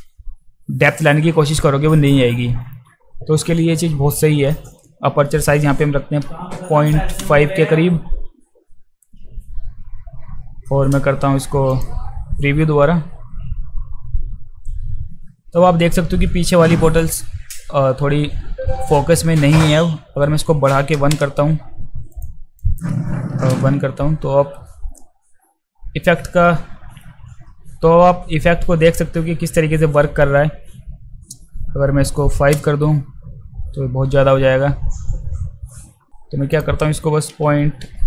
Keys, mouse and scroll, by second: 11.7 click, 22.2 click, 22.6 click, 36.5 click.